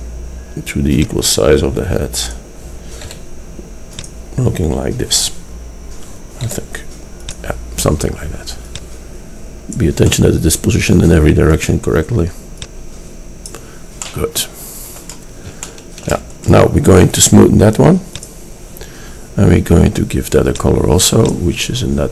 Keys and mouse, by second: 1.0 click, 3.2 s, 6.5 s, 8.7-10.0 drag, 10.2 click, 10.4-11.0 middle drag, 14.2-14.6 middle drag, 20.1 middle click.